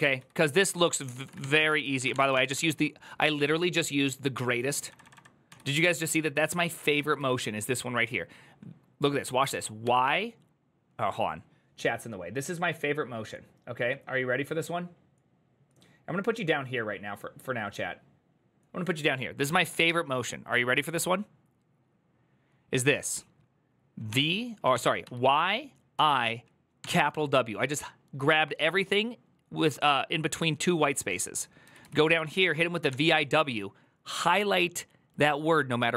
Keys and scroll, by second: 0.4-5.8 typing, 9.3-10.1 typing, 24.5 ctrl+c, 24.5-26.6 typing.